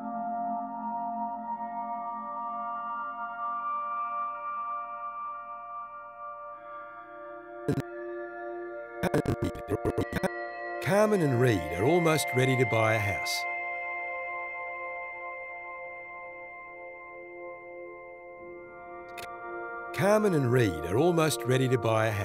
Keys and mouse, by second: 0.1 click, 2.7 a, 3.5 click, 6.7 click, 7.7-10.6 drag, 10.4 space, 13.4 space, 16.3 click, 17.8 i, 19.0-22.2 drag, 19.6 space.